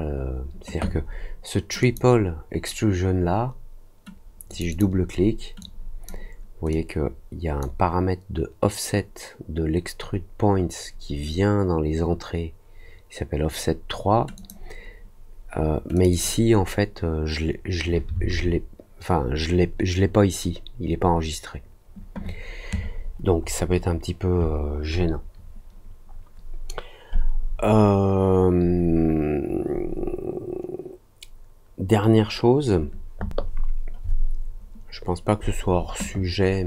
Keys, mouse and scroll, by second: 1.7 click, 4.4 click, 4.6 click, 5.5 click, 6.6 click, 14.3 click, 15.9 click, 16.0 click, 23.0 middle click.